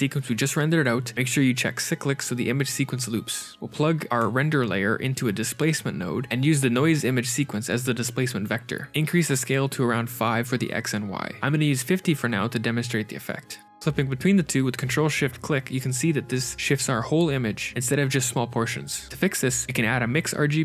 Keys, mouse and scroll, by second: 0.4 click, 3.0 shift+a, 6.2 click, 6.6 middle click, 8.8 click, 13.6 ctrl+shift+click, 13.7 middle click, 13.7-14.8 scroll up 5, 15.6 ctrl+shift+click, 18.6 middle click, 19.9 g.